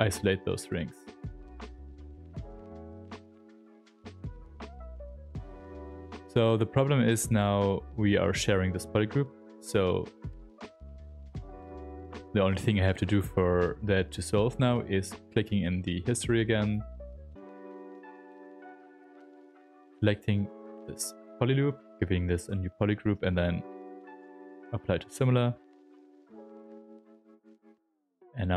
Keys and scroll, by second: 1.0 r, 17.2 r, 21.9 ctrl+w, 25.4 r.